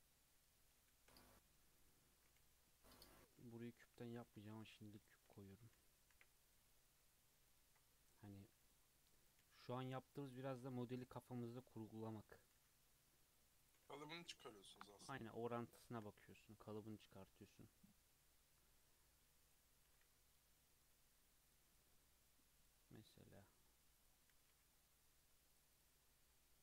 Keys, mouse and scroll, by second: 0.1-0.9 shift+middle drag, 0.9 shift+a, 2.4 g, 3.4 g, 4.2 Tab, 4.5 alt+z, 4.8 click, 5.4 alt+z, 5.7 click, 6.1 1, 6.4 drag, 6.6 g, 7.9 click, 8.2 g, 9.1 click, 9.4 g, 10.5 click, 10.8 g, 12.2 click, 12.5 g, 13.8 Tab, 14.1 alt+z, 14.6-15.0 scroll down 2, 15.0-15.9 shift+middle drag, 15.9 shift+scroll up 2, 16.2 scroll down 1, 16.4-16.9 middle drag, 16.9 click, 17.2-17.6 scroll up 2, 17.2 middle drag, 17.6-19.4 middle drag, 19.4 click, 19.9 s, 21.7 click, 21.9-22.6 middle drag, 22.6 click, 23.2 click, 23.6-24.0 middle drag, 24.0 click, 24.3 s, 25.7 click, 26.0-26.6 middle drag.